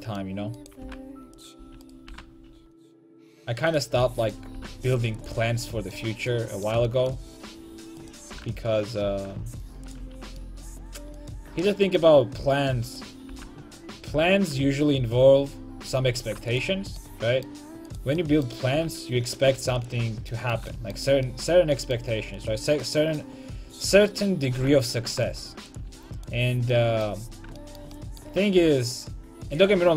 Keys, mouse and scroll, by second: 0.1 a, 0.2 click, 0.6 right click, 0.9 g, 1.4-4.1 right drag, 1.6 a, 2.1 g, 3.3 a, 4.2 middle click, 4.6 g, 5.5 a, 5.9 middle click, 8.4 g, 10.1 a, 11.2-16.6 right drag, 13.4 g, 16.9 a, 17.0 middle click, 17.9-19.8 right drag, 18.8 g, 19.9 click, 20.0 a, 22.5-24.6 right drag, 24.6 g, 25.9 a, 26.2-28.1 right drag, 28.6 g, 29.8 a.